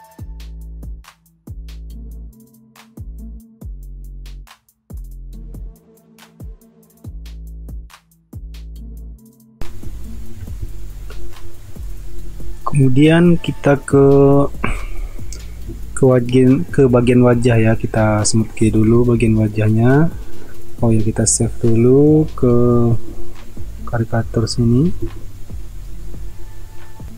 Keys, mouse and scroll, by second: 1.1 space, 2.5 ctrl+alt+z, 4.6-7.7 typing, 9.1 ctrl+alt+z, 9.7 space, 19.0 ctrl+s.